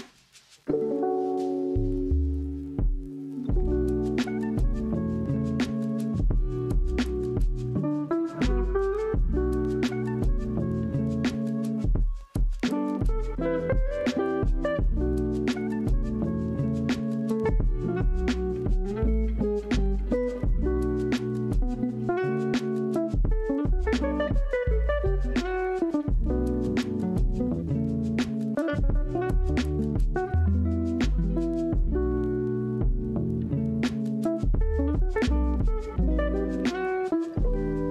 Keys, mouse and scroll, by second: 1.5 g, 3.9 z, 5.2 click, 5.9-8.2 middle drag, 8.2 click, 9.2-11.2 middle drag, 11.2-15.8 drag, 15.8-16.2 middle drag, 16.2 Tab, 16.8-18.4 middle drag, 18.4 ctrl+r, 22.8-24.8 middle drag, 24.8 ctrl+r, 25.8-28.5 middle drag, 28.5 Tab, 28.9 right click, 29.8-31.4 middle drag, 31.4 Tab, 32.3 middle click, 32.9 ctrl+r, 36.1 g.